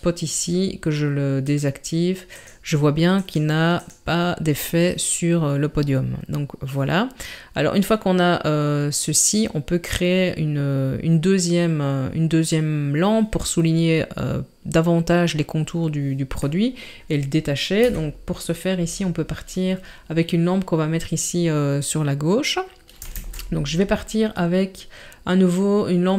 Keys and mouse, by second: 1.5 click, 2.4 click, 3.2 click, 3.8 click, 16.6-17.0 middle drag, 17.8 KP_7, 23.2 shift+a.